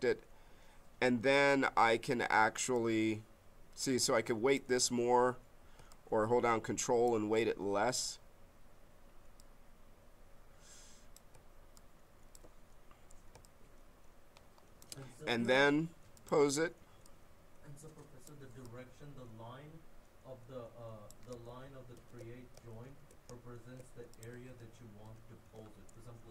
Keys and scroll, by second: 4.8 ctrl+z, 7.3 ctrl+z, 21.4 ctrl+z, 24.5 ctrl+z.